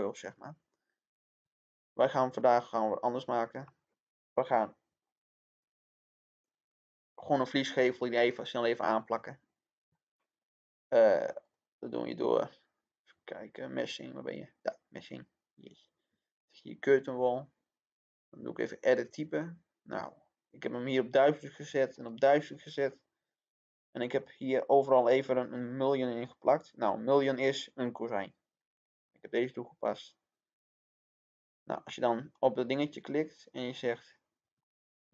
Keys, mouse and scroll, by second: 1.1 click, 1.4 middle click, 3.4-19.2 drag, 20.2-20.8 scroll down 1, 20.8 click, 34.6-35.1 middle drag.